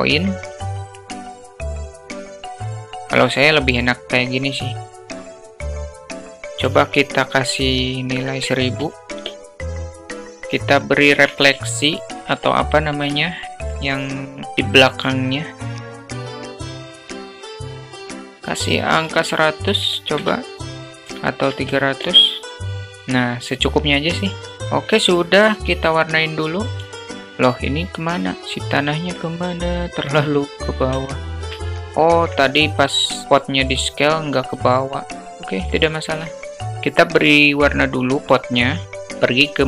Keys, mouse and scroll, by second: 0.9 alt+middle click, 1.7-2.3 drag, 2.3 alt+middle click, 2.7-3.4 drag, 4.0-5.0 drag, 5.5 click, 6.1-10.0 drag, 7.0 0, 11.4 shift+d, 13.4-13.9 middle drag, 14.5-15.3 drag, 15.4-15.8 alt+middle drag, 15.9 alt+middle click, 16.3 click, 16.7 alt+middle click, 17.1 click, 17.7 click, 18.2-22.4 drag, 20.0 0, 21.9 0, 23.6 click, 28.3 alt+z, 28.7-29.3 alt+middle drag, 29.9-31.0 drag, 31.2-31.6 shift+middle drag, 31.7-32.4 alt+middle drag, 34.6 s, 35.1-35.8 alt+middle drag, 38.6 click.